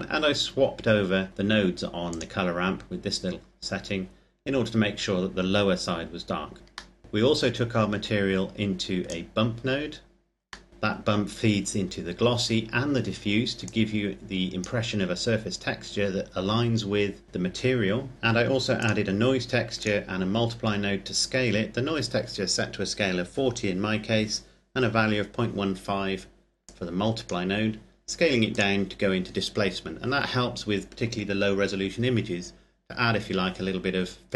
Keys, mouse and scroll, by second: 1.8 click, 4.1 scroll up 1, 4.3 scroll down 1, 4.5-6.3 scroll up 1, 6.3-6.7 scroll down 1, 6.7 middle click, 8.0-8.8 scroll up 1, 8.8 click, 10.4 middle click, 13.4 click, 15.1-15.7 scroll up 1, 18.1 middle click, 18.5 click, 26.4 click, 33.8-34.3 scroll up 1.